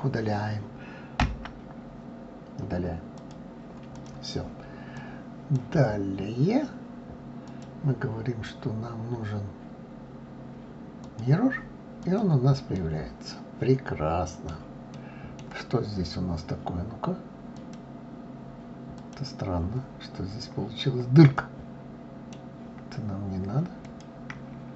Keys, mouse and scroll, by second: 0.0-1.2 right drag, 1.2 Delete, 3.9 click, 4.9 click, 7.5-10.5 drag, 12.0 click, 12.7-17.5 middle drag, 17.5 click, 19.0 click, 20.2-20.6 scroll up 2, 21.3-23.8 middle drag, 23.8 click.